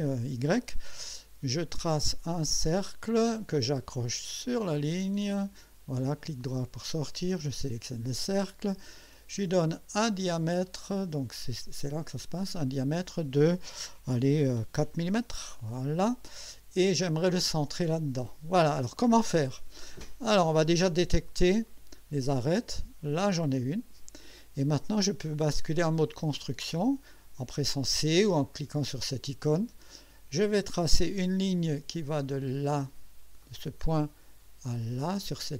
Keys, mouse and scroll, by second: 2.5 click, 4.3 click, 5.3 click, 6.2 right click, 7.3 click, 11.2 click, 11.9 click, 14.7 4, 15.1 Return, 21.7 click, 23.2 click, 28.4 click, 30.6 click, 33.4 click.